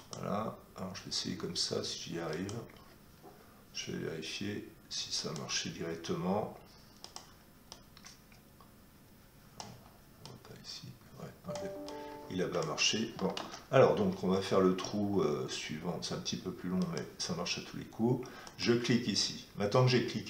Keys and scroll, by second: 13.3 ctrl+z.